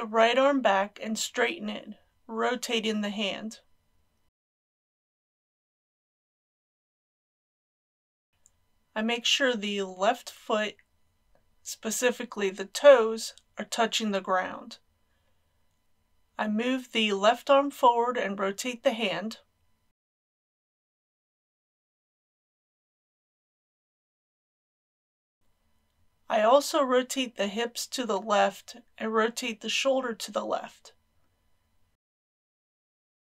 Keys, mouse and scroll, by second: 0.9 g, 1.2 x, 5.8 click, 6.0 g, 6.2 z, 6.5 click, 6.6 r, 7.6 click, 10.5 r, 15.5-16.8 middle drag, 17.6 click, 20.1 KP_1, 21.3 g, 21.5 x, 22.1 click, 22.8 r, 23.5 click, 23.6-25.3 middle drag, 26.0-26.7 scroll up 1.